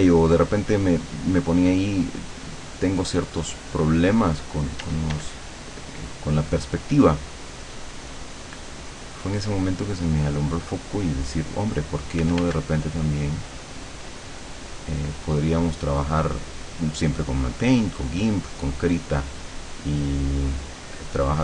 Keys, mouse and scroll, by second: 4.9 d, 5.3-8.2 drag, 8.8-11.8 drag, 12.3 f, 12.6-17.0 drag, 17.6-21.4 drag.